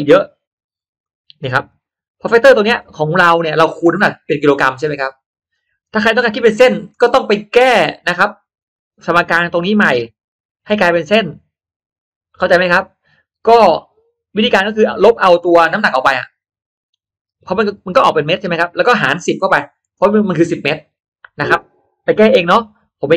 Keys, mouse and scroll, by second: 0.7 click, 1.0 click, 1.6 click, 15.7-19.7 drag, 22.3 Escape.